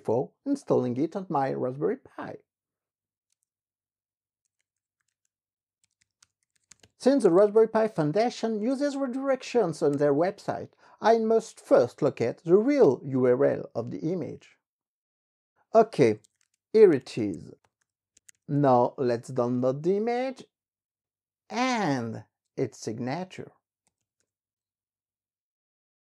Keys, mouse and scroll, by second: 0.0 click, 2.3 click, 3.7 alt+Tab, 4.4-9.1 typing, 10.2 ctrl+shift+v, 13.1 Return, 15.8-19.0 typing, 19.6 click, 21.1 click, 22.2 ctrl+shift+v, 23.2-25.3 typing.